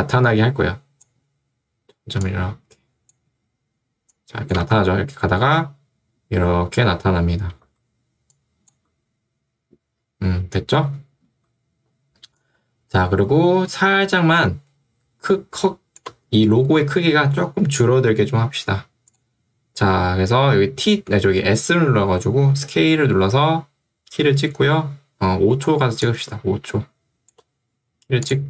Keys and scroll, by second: 4.7 space, 7.7 space, 11.3 space, 21.9 s.